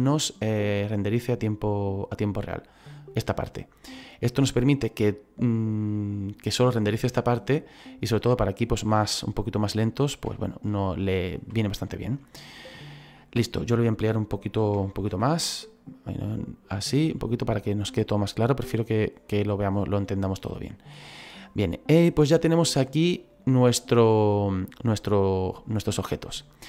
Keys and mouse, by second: 7.8 middle click, 10.3 middle click, 11.6 shift+middle click, 15.0 ctrl+b, 15.8 click, 18.1 shift+middle click, 26.3 shift+middle click.